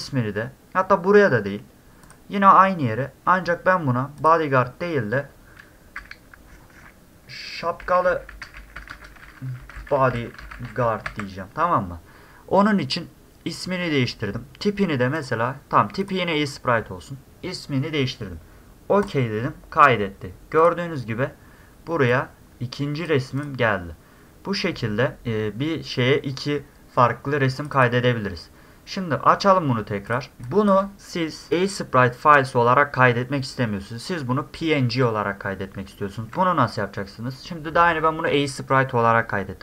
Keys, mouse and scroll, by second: 2.0 click, 4.2 click, 7.9 a, 8.4 a, 8.9 space, 10.0 d, 10.7 a, 11.1 d, 15.2 click, 16.0 click, 19.0 click, 20.6 click, 22.1-23.1 drag, 23.4 click, 27.6 click, 27.7 click, 30.1 click, 30.4 space, 30.5 drag, 30.9 middle click, 30.9 scroll up 2.